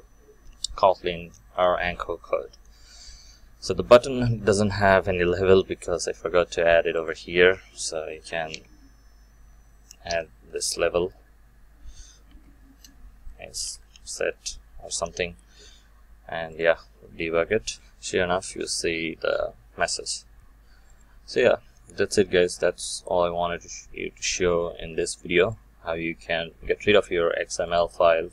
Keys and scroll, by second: 16.5 shift+F9.